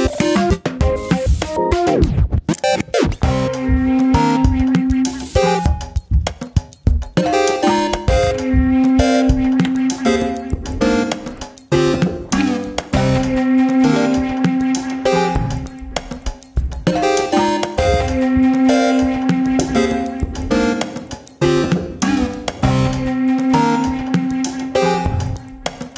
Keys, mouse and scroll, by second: 0.3 KP_3, 0.7 KP_1, 1.2 middle click, 1.5 KP_7, 1.7 scroll up 1, 1.9 shift+middle click, 2.2 alt+/, 2.7 ctrl+r, 3.9 ctrl+r, 7.4-7.8 scroll up 2, 7.8 shift+middle click, 9.0 click, 9.3 click, 9.6 Tab, 9.9 alt+/, 10.2 shift+middle click, 10.5-11.5 scroll up 1, 11.8-12.1 scroll down 1, 12.1-13.1 middle drag, 13.2 middle click, 13.7 KP_7, 14.1 shift+middle click, 14.3 click, 16.0 click, 17.9-18.3 drag, 19.1 click, 20.0 ctrl+r, 22.1 ctrl+r, 23.9 ctrl+s, 24.1 click, 24.3 Tab, 24.4 click, 24.6 scroll down 3, 24.8-25.8 middle drag.